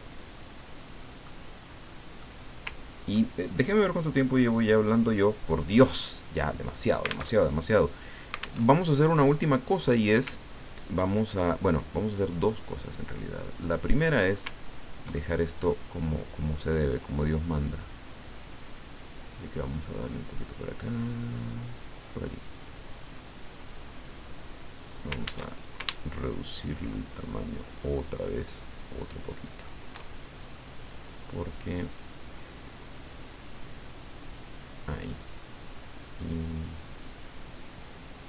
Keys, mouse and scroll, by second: 0.1 click, 1.2 middle click, 4.1 click, 5.0 click, 7.3 alt+Tab, 8.6 alt+Tab, 9.3 click, 14.0 click, 14.6-14.9 ctrl+scroll up 2, 15.1 ctrl+click, 16.9 click, 18.5-22.2 drag, 22.3-24.8 drag, 25.5 ctrl+shift+click, 26.4-30.3 ctrl+shift+drag, 30.4-33.0 ctrl+shift+drag, 33.8-35.3 drag, 35.7-38.2 drag.